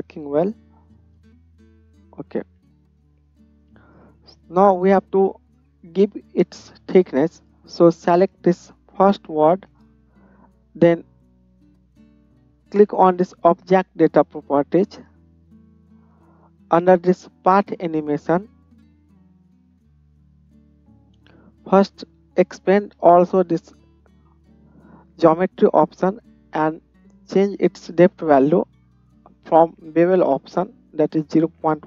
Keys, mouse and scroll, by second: 0.9 space, 9.1-13.8 middle drag, 13.8 click, 13.9-17.9 middle drag, 17.9-31.8 drag.